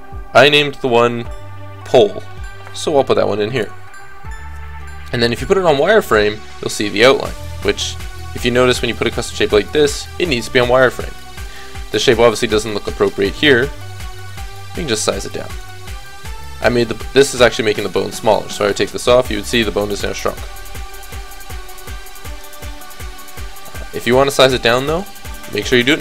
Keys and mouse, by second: 1.0-5.7 middle drag, 5.7 click, 6.3 middle click, 6.5 click, 7.0-10.4 middle drag, 14.3 s, 17.7-18.7 middle drag, 18.7-20.6 drag, 20.2 ctrl+z, 21.3 s, 23.1 ctrl+z, 24.9-25.9 drag.